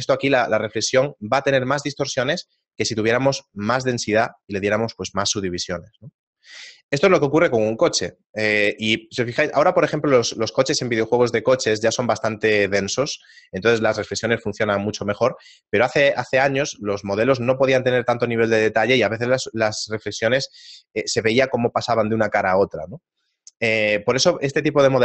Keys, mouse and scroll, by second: 3.7 click, 4.0 click.